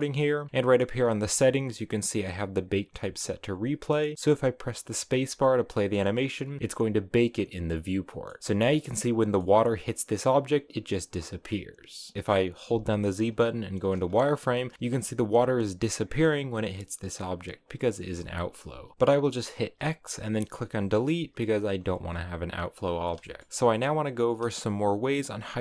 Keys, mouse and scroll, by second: 0.4-0.9 scroll up 3, 0.9-1.5 scroll down 2, 1.5-2.5 scroll down 1, 2.5-3.5 drag, 3.9-5.3 middle drag, 5.3 space, 5.4-7.7 middle drag, 7.7 scroll down 1, 7.9 middle click, 8.4-9.0 scroll up 1, 9.0-12.6 middle drag, 12.6 z, 14.0-14.4 scroll up 3, 14.4 shift+middle click, 14.7 space, 18.7 scroll down 1, 18.9 x, 19.7 x, 21.7-22.1 scroll down 5, 22.1-23.1 drag, 23.1 shift+middle click.